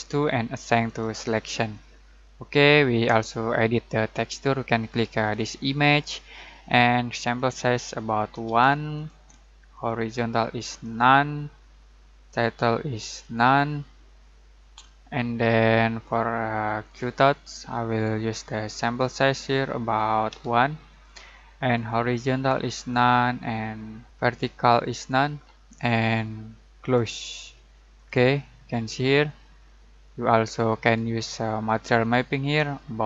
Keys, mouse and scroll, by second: 0.8 click, 5.3 click, 8.4 1, 8.9 click, 16.8 click, 20.3 1, 20.9 click, 31.6 click.